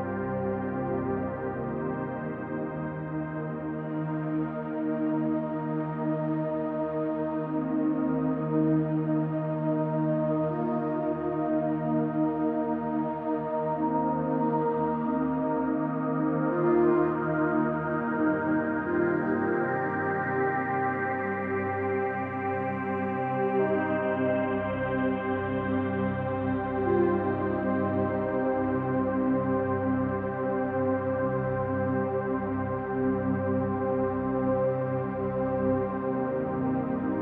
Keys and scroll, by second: 5.1 p, 9.6 =, 10.0 =, 10.9 space, 11.2 space, 12.5 ctrl+=, 12.7 ctrl+=, 12.9 space, 13.2 space, 13.9 space, 14.2 space, 15.4 space, 15.7 space, 16.8 space, 17.0 space, 18.4 space, 18.6 space, 19.6 space, 19.8 space, 22.2 space, 22.4 space, 23.8 space, 24.1 space, 27.4 r, 29.0 space, 29.3 space, 29.5 p, 30.8 space, 31.1 space, 31.7 ctrl+z, 32.4 z, 33.9 r, 35.5 r, 36.9 space, 37.1 space.